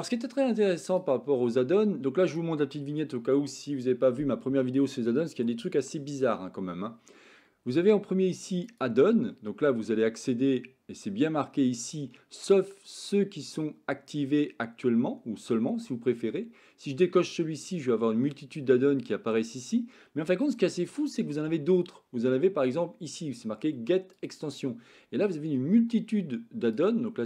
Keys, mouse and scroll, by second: 0.9-2.4 drag.